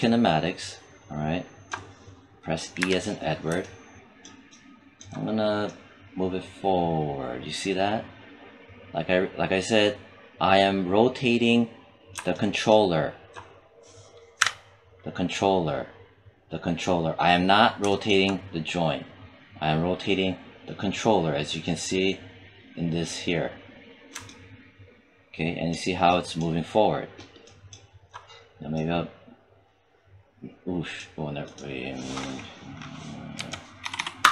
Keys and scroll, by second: 2.6 e, 14.2 q, 33.2 1, 33.7 0, 34.1 Return.